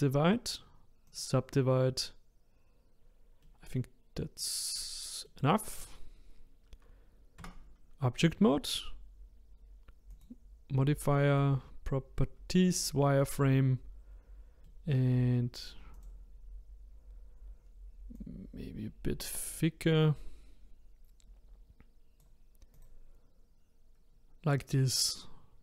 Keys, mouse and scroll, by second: 3.4-4.7 middle drag, 4.7 click, 5.3-7.4 middle drag, 7.4 Tab, 10.1 click, 11.3-14.4 drag, 14.6-15.9 middle drag, 15.9 click, 16.4-17.1 scroll up 2, 17.1-18.1 scroll down 1, 18.1-21.3 drag, 22.7 click, 23.7-25.6 scroll down 1.